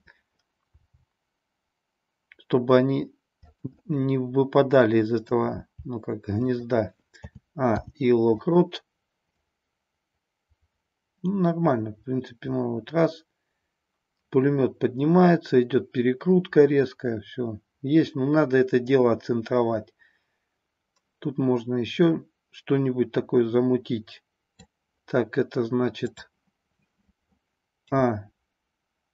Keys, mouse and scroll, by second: 0.7 g, 3.5 click, 3.7-5.3 middle drag, 5.4 g, 6.4 click, 7.2 a, 7.7 i, 9.4-24.7 drag, 26.1 click, 27.8 a.